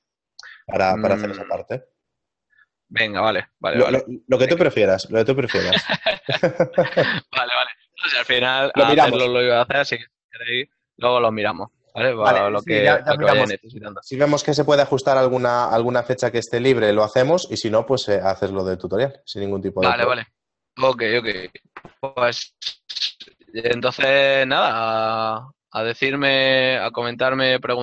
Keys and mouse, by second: 4.7 click, 6.8 alt+middle click, 9.3 click, 12.2 middle click, 15.5 click, 17.1 middle click, 19.0 middle click, 26.9 click.